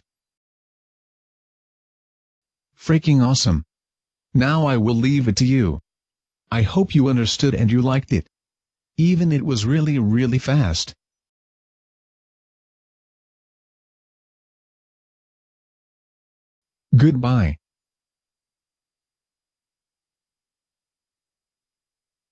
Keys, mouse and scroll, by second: 20.7 Escape.